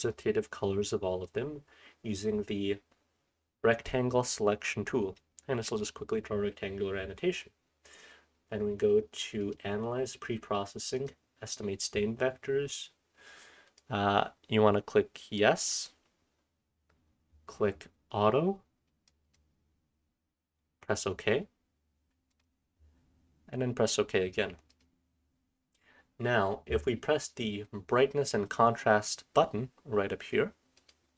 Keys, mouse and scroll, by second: 0.8-1.2 drag, 1.0-4.5 scroll up 1, 4.5-9.4 scroll up 1, 9.4 click, 9.4-11.0 scroll up 1, 29.9-30.7 scroll down 1, 30.7 click, 30.9-31.1 scroll down 1.